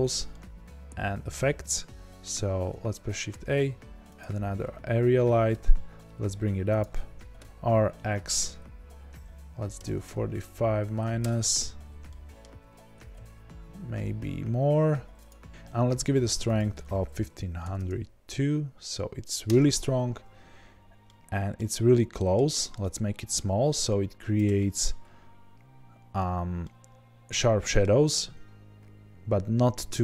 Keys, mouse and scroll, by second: 4.1 shift+a, 5.5 g, 6.8 click, 7.4 r, 11.3 KP_Enter, 12.0-15.2 middle drag, 12.6 r, 15.2 click, 19.4-21.0 drag, 19.4 KP_0, 19.4 KP_Enter, 20.6-21.0 scroll down 2, 21.0-22.8 middle drag, 22.8 click, 23.0-30.0 middle drag, 25.8-26.5 scroll up 2, 28.1-28.6 scroll down 2, 29.7 scroll up 1.